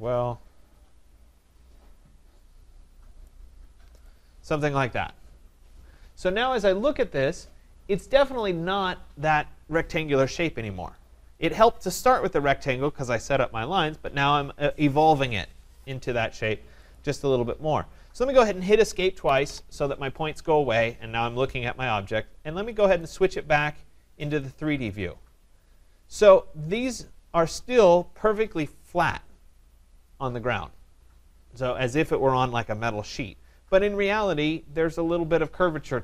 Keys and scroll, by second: 19.2 Escape.